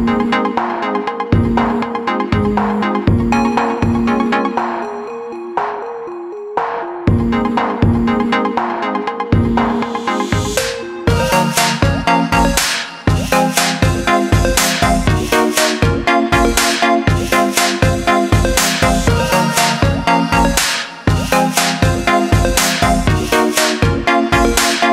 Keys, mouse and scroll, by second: 4.0-16.2 drag, 16.9-19.9 middle drag, 22.1-24.9 drag.